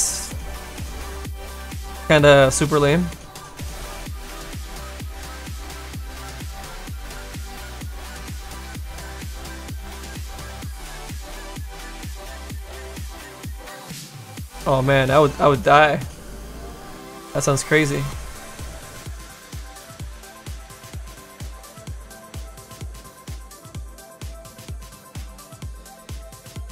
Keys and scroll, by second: 2.1 s, 6.5 s, 10.5 s, 12.3 s, 13.0 s, 17.1 s, 17.7 s, 20.4 s, 21.6 s, 22.0 s, 23.1 s.